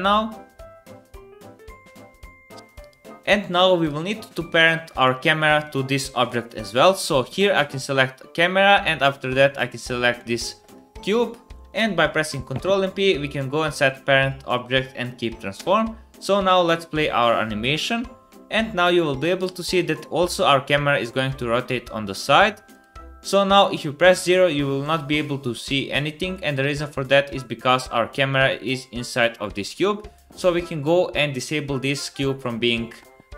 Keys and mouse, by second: 3.2 space, 6.4 click, 7.6-9.6 shift+drag, 10.6 shift+click, 12.1 ctrl+p, 15.5 space, 18.5 middle click, 22.3 space, 23.6 KP_0, 27.3 middle click, 28.4 middle click, 29.0 middle click, 29.4 middle click, 29.8 click.